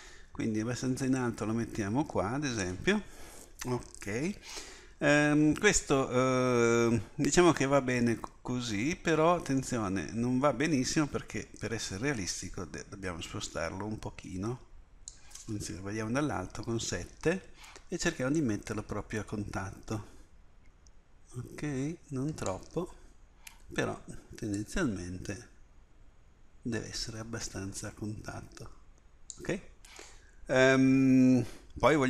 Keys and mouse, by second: 1.2-5.2 drag, 8.2-8.6 middle drag, 9.0-10.2 middle drag, 10.9-15.0 drag, 16.3 KP_7, 18.4-19.6 drag, 24.6-29.3 drag, 30.2-30.7 middle drag.